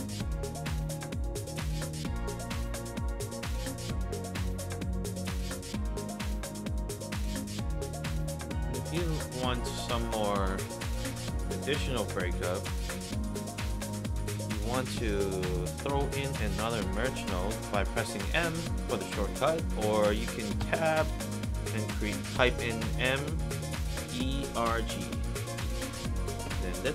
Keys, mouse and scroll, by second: 0.9-1.3 middle drag, 2.5 click, 3.4 scroll down 2, 3.7-4.0 middle drag, 6.1 click, 6.6 scroll down 2, 6.8-7.2 middle drag, 7.4 scroll down 2, 7.6 middle drag, 8.5-8.8 middle drag, 9.5 drag, 11.0 click, 11.8 click, 12.7 middle drag, 13.1-13.5 middle drag, 13.5 click, 15.5 click, 16.0 m, 18.4 click, 20.0 click, 20.6 Tab, 22.5 m, 23.8-25.3 typing, 26.4 Return.